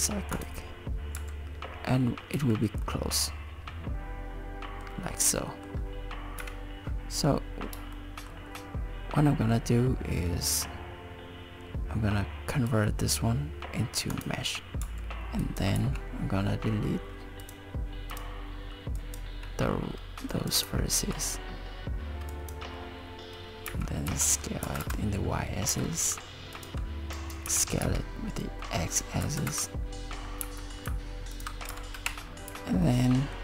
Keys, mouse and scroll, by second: 1.2 Tab, 2.4 z, 2.9 middle click, 5.3 middle click, 6.4 KP_7, 8.0 shift+middle click, 12.5 right click, 14.8 Tab, 15.4 click, 15.8 z, 17.4 click, 18.1 click, 19.0 click, 20.3 click, 20.6 x, 22.3 click, 23.7 s, 25.6 g, 27.1 click, 27.5 s, 30.4 g, 31.7 Tab, 32.5 z, 32.8 middle click.